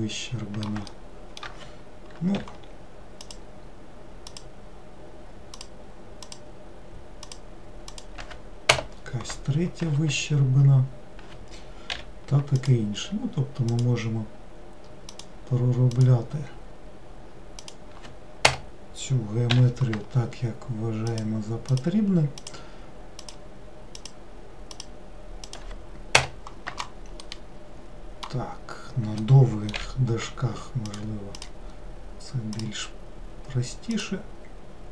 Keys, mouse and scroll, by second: 0.0-2.5 middle drag, 2.5 k, 12.0 k, 19.6 k, 27.4-29.9 middle drag, 29.9 k.